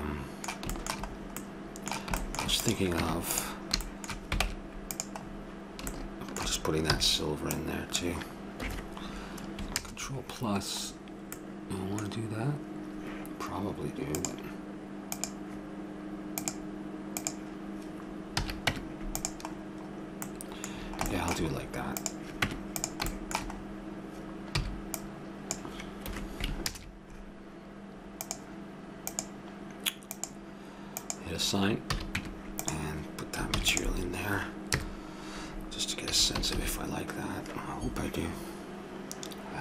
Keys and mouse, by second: 2.6-3.8 drag, 2.6-3.8 right drag, 3.0 Tab, 4.4 ctrl+Tab, 7.0 c, 9.8 ctrl+KP_Add, 14.1-17.1 drag, 17.2-19.3 drag, 18.4 a, 18.7 Tab, 19.6-20.8 middle drag, 22.0-24.6 drag, 22.5 Tab, 24.6 c, 26.6 ctrl+KP_Add, 28.2-30.9 drag, 31.0-32.8 drag, 31.9 a, 32.2 Tab, 33.5 ctrl+s, 34.7 KP_0, 36.1 a, 37.0 shift+z.